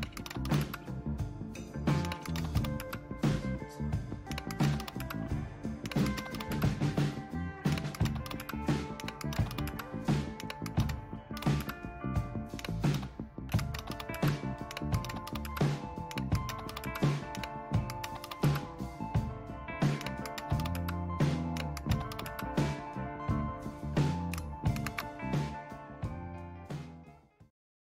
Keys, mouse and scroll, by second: 0.0-1.0 typing, 2.0-3.1 typing, 4.3-18.8 typing, 20.0-22.6 typing, 24.0-27.1 typing, 27.9 click.